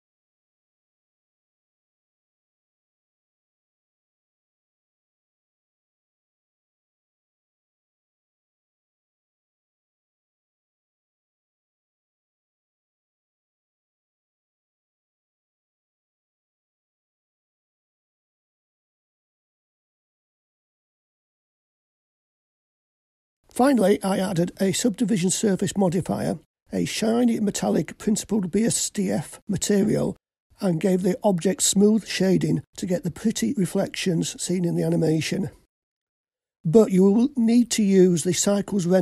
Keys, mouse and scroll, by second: 1.7 Tab, 3.3-3.9 scroll up 4, 4.5 scroll up 2, 8.8-22.5 drag, 23.3 click, 24.8-27.8 drag, 30.1 click, 30.8 click, 32.1 click, 36.0-39.0 drag.